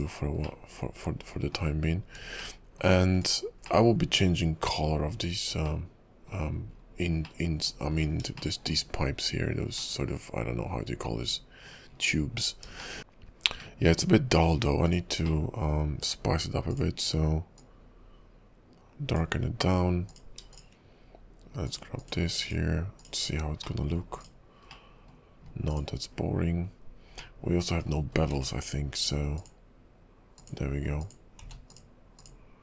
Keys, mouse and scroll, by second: 0.6 middle click, 2.5 shift+middle click, 3.2 click, 3.8 middle click, 5.4-5.8 scroll up 3, 5.8 middle click, 6.9-7.3 scroll down 4, 7.4 middle click, 7.9-8.4 scroll up 4, 8.5 shift+middle click, 9.1 scroll up 2, 9.9 middle click, 12.1-12.9 scroll down 11, 12.9 shift+middle click, 13.0 shift+middle click, 13.8 middle click, 14.9 click, 15.4 middle click, 16.7 click, 20.1 click, 20.6 shift+click, 21.6 click, 22.0 click, 22.4 click, 23.8 middle click, 24.2 click, 24.8 middle click, 25.7 click, 27.3 middle click, 28.1-28.6 scroll up 2, 28.3 q, 31.0 click, 31.4 q.